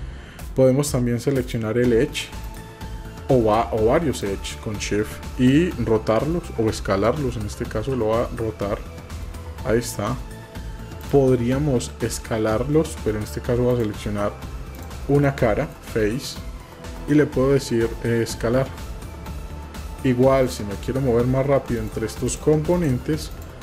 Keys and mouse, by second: 1.4 click, 2.4 click, 8.0 r, 13.7 click, 14.7 click, 15.3 middle click, 21.8 click, 22.2 click, 22.8 click, 23.3 click.